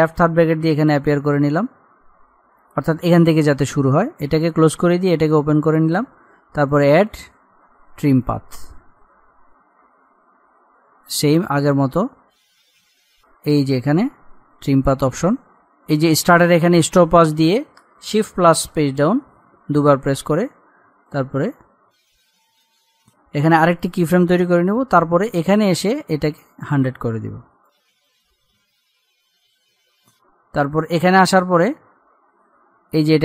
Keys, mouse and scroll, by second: 0.4 [, 1.9-2.3 scroll down 1, 9.9-11.1 scroll down 1, 11.1 click, 12.7 scroll up 1, 13.9 click, 15.1-15.8 scroll down 1, 15.8-18.6 drag, 18.7 Page_Down, 21.1-22.9 drag, 22.9 ctrl+z, 23.9-30.0 drag, 31.5-32.2 scroll up 1.